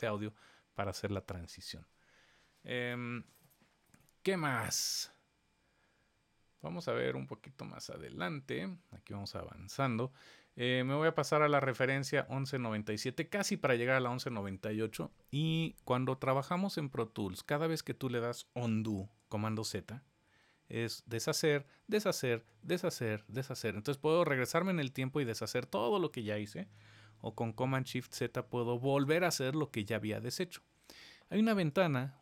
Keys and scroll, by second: 20.2 super+z, 21.4 super+z, 27.2 shift+super+z, 27.7 shift+super+z.